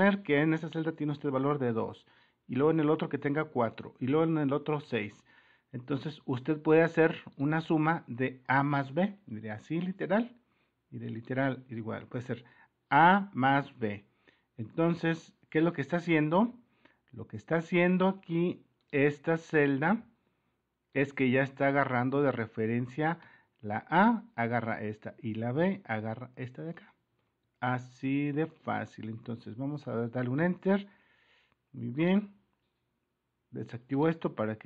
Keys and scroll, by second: 0.4 super++, 16.7 super+-, 16.7 typing, 19.1 super+-, 27.4 super+-, 29.6 Return, 33.2 Return.